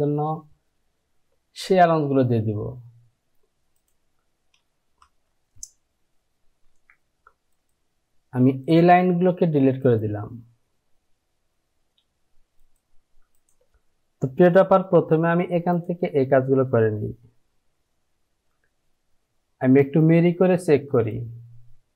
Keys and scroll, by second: 6.7 Delete.